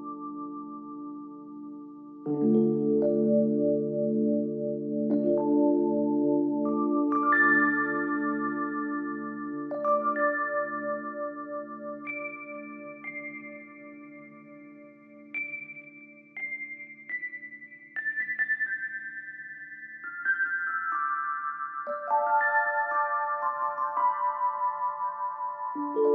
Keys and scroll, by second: 2.8 ctrl+z, 15.7 ctrl+j, 24.4 ctrl+z.